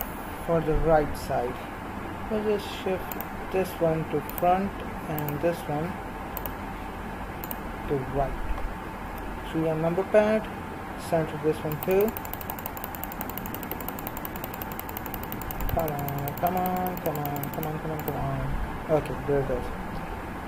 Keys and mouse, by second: 9.1 KP_3, 12.0-19.8 drag.